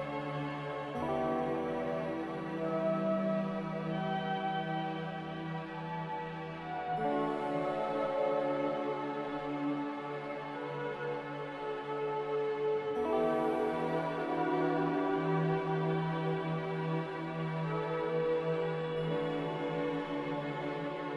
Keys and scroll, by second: 7.9 a, 19.6 2, 20.4 5.